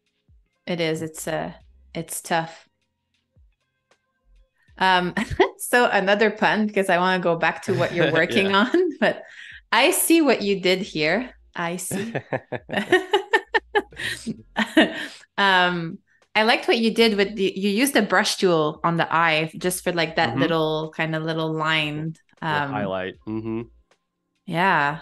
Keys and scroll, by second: 2.8 super+-, 4.2 super+y, 4.9 z, 5.8 a, 8.4 super+-, 10.4 super+y, 10.7 space, 17.2 shift+m, 19.2 a, 21.2 super+c, 22.2 super+z, 24.9 Delete.